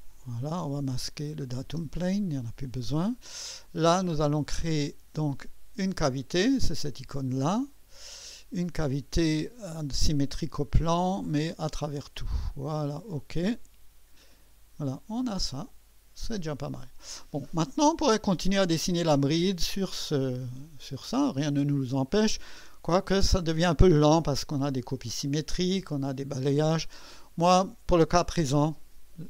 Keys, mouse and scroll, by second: 1.2 click, 1.6 typing, 2.6 click, 7.6 click, 9.7 click, 10.9 click, 11.6 click, 12.9 click, 16.2-17.1 drag, 20.1-22.4 drag, 24.9-26.4 drag.